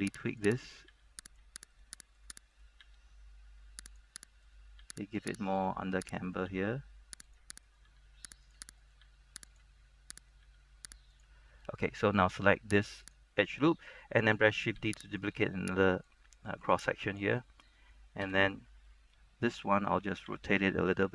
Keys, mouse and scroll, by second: 0.1 g, 0.4 click, 0.8 right click, 1.4 click, 1.8 right click, 3.0 g, 4.0 click, 4.6 right click, 4.9 g, 5.3 click, 5.7 right click, 6.7 g, 7.4 click, 7.7 right click, 8.0 g, 8.6 click, 8.9 right click, 9.2 g, 9.6 click, 10.7 right click, 11.2 click, 11.7 scroll down 1, 11.8 middle click, 12.4-13.2 scroll up 1, 13.2 alt+right click, 13.6 scroll down 1, 13.7 middle click, 14.9 shift+d, 15.2 right click, 16.2 click, 16.5 click, 17.6 middle click, 18.3 KP_3, 19.0 shift+middle click, 19.4-20.4 scroll up 1, 20.4 r.